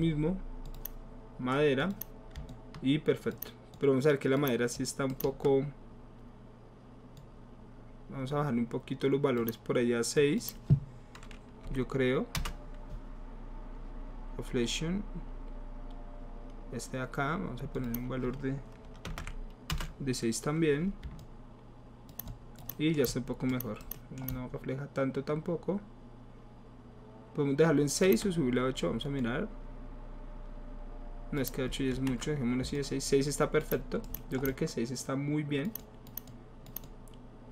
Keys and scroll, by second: 11.7 KP_6, 12.3 Return, 19.1 BackSpace, 19.3 KP_6, 19.7 Return, 31.9 ctrl+z, 32.6 ctrl+alt+z.